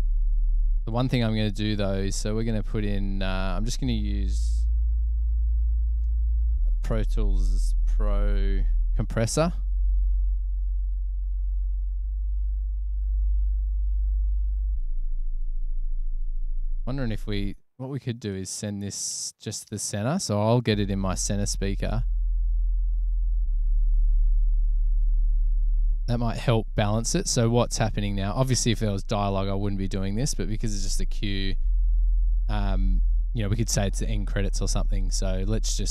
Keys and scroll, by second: 4.4-5.3 typing, 7.4-8.3 typing, 8.9 Page_Down, 9.6 Up, 10.3 Return, 19.2 space, 20.5 space.